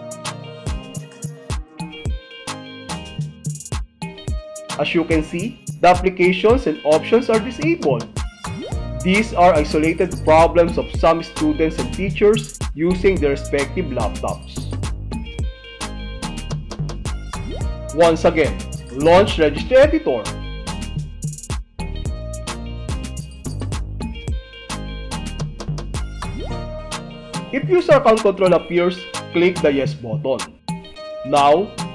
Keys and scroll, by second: 9.2 ctrl+w, 20.4 super+x, 22.4 i, 26.5 Return, 28.7 Left, 29.8 space.